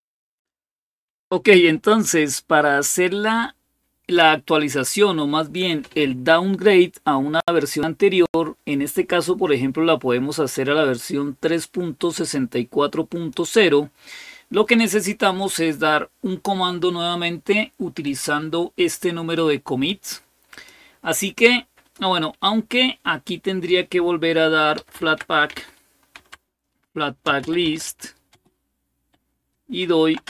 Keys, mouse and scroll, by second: 10.7-13.1 drag, 17.8-19.7 drag, 20.3 click, 20.6 click, 24.3-28.1 typing, 29.6-30.2 typing.